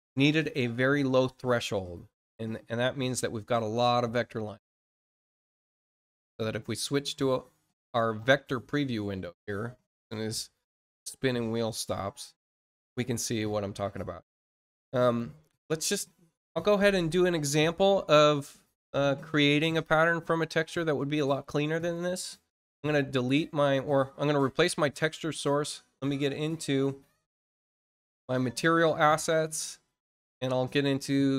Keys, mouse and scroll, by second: 4.7 click, 7.7 click, 21.7 click, 22.7 click, 26.3 middle click, 26.8 middle click, 27.7 click, 29.0 click, 29.5 click, 30.5 middle click, 31.1 middle click.